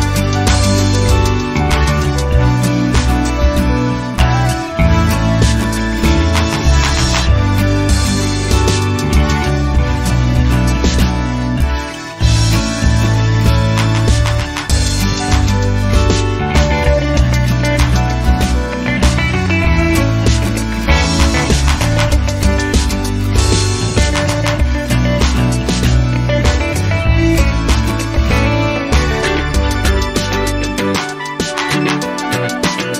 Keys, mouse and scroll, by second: 0.7-2.7 drag, 3.1 click, 4.1-5.1 drag, 5.2-9.5 drag, 10.0 0, 11.5 click, 13.1 click, 14.4-19.1 drag, 19.3 scroll down 2, 20.4 click, 22.0 click, 23.1-28.7 drag, 28.8 scroll down 1, 29.3-29.6 scroll up 1, 30.9 scroll down 1, 31.4 scroll up 1.